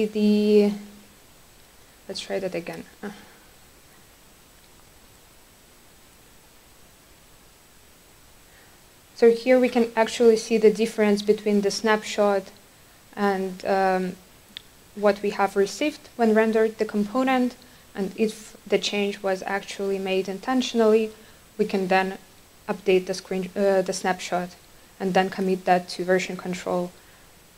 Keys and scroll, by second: 3.9 super+r.